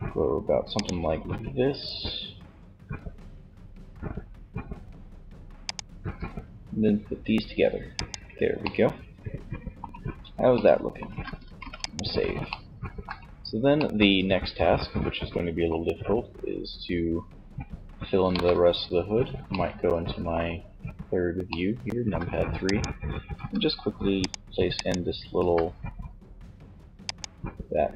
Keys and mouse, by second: 0.0-1.7 drag, 0.4 e, 4.8-6.6 drag, 5.1 e, 7.1-8.7 drag, 10.6 ctrl+s, 17.3 KP_3, 22.4 g, 24.5 g, 27.5 g.